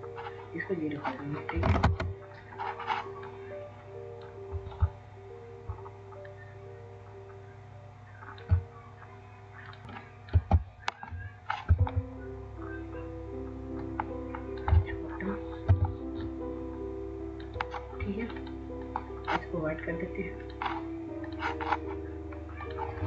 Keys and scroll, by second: 1.3 typing, 1.5 Return, 9.6-10.3 typing, 15.4 w, 19.9 typing.